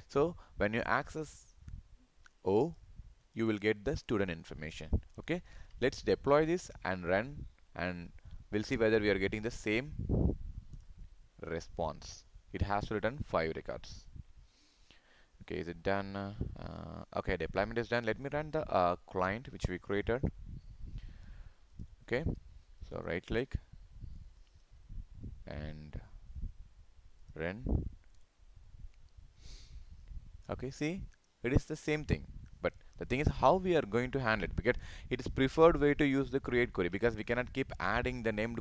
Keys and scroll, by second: 5.6 ctrl+s.